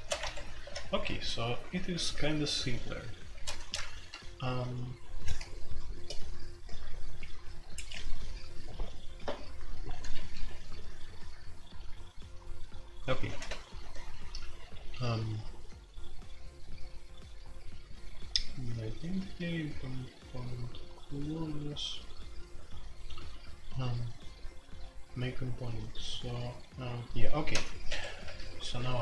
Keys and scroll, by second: 0.0-29.0 typing, 10.1 Escape, 27.8 Escape.